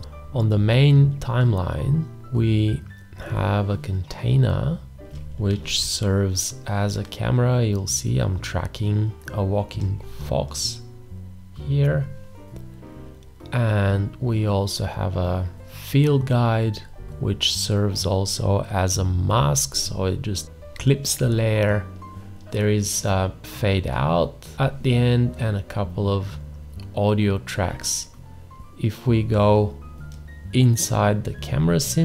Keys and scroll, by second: 5.6 ctrl+a.